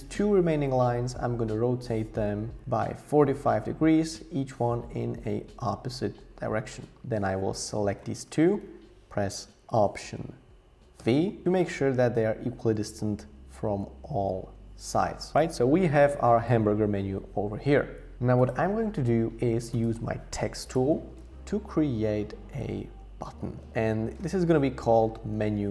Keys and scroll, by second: 11.0 alt+v, 20.3 t, 22.7-25.7 typing.